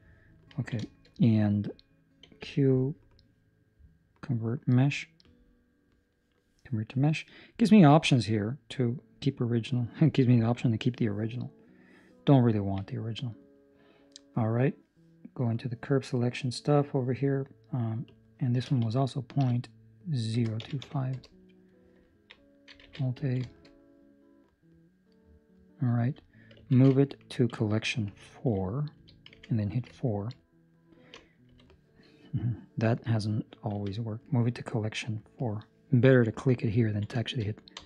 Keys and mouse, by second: 0.4 ctrl+middle click, 1.0 shift+middle click, 2.3 q, 7.6 click, 12.5 ctrl+middle click, 12.8 middle click, 15.5 click, 16.4 middle click, 18.0 click, 22.0 ctrl+middle click, 22.8 alt+a, 23.2 ctrl+middle click, 23.4 shift+middle click, 23.6 middle click, 25.3 right click, 25.9 Escape, 26.5 m, 28.9 Escape, 29.8 4, 29.9 ctrl+middle click, 30.4 middle click, 31.4 3, 33.6 m, 36.7 ctrl+middle click, 37.1 shift+middle click, 37.7 4.